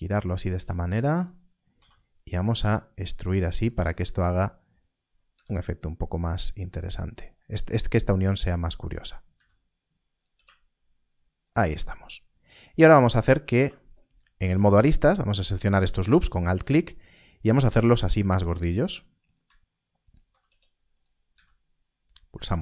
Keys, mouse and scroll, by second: 0.2 click, 0.5 g, 1.1 click, 1.6 click, 1.9 e, 2.4 click, 3.3 click, 5.2 g, 7.0 click, 8.2 r, 8.8 click, 10.2 g, 11.3 shift+click, 13.4 2, 14.8 alt+click, 17.5 click, 17.6 g, 18.4 click, 18.7 s, 20.0 alt+click, 21.2 g.